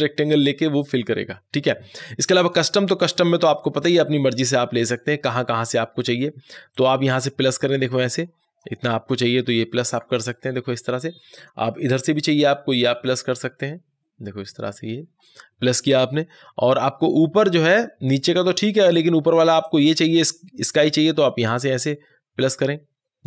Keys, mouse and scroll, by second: 2.3 click, 2.3 click, 6.6 click, 6.6-12.0 drag, 12.0-19.5 drag, 19.5-23.2 drag.